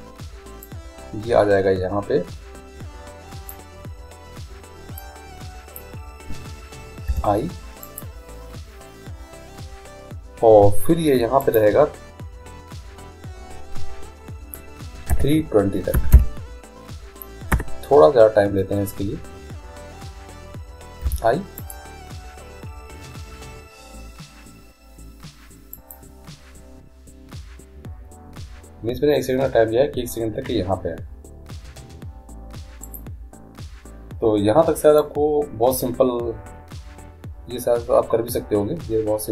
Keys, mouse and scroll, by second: 0.7-2.6 drag, 5.0-6.9 drag, 7.2 i, 11.5-13.3 drag, 21.1 i, 25.8-27.6 drag, 32.9-34.7 right drag, 35.0-36.8 drag.